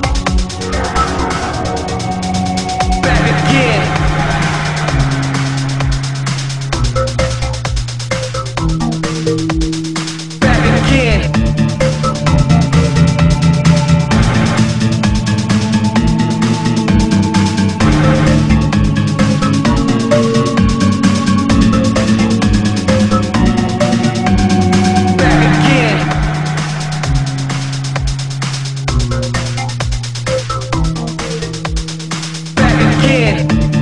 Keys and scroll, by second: 12.5 alt+space, 13.3 alt+space, 13.6 ctrl+z, 14.1 alt+space, 15.0 ctrl+z.